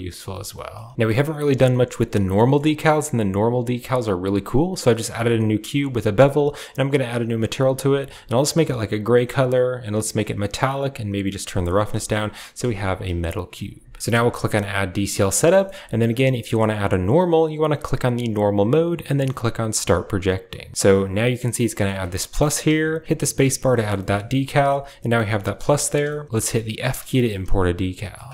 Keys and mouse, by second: 1.6 shift+middle click, 2.3 shift+middle click, 4.9 Tab, 5.5 Tab, 7.3 click, 9.3 click, 10.3 click, 11.6 middle click, 11.9 shift+middle click, 12.7 KP_Decimal, 14.5 click, 15.0 middle drag, 15.4 shift+middle click, 15.9 click, 18.1 click, 19.4 click, 21.3-28.3 middle drag.